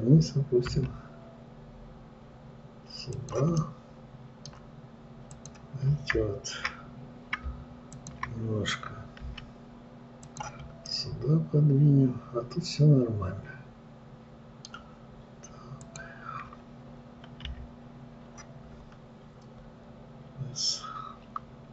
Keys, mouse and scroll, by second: 1.1 g, 4.0-5.8 middle drag, 5.8 click, 8.3 shift+click, 9.7 g, 11.3-14.3 middle drag, 16.2 click, 17.8 KP_3, 19.1 scroll up 2.